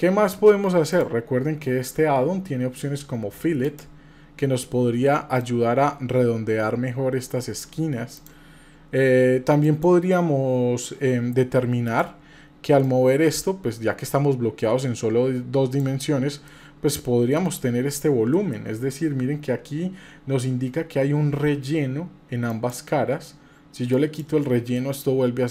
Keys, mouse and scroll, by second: 0.9 shift+click, 3.6 click, 5.4-7.7 drag, 8.1 click, 9.6 click, 11.9 click, 12.8-15.8 drag, 16.4 middle click, 18.3 shift+middle click, 22.5-24.2 drag, 24.7-25.5 middle drag.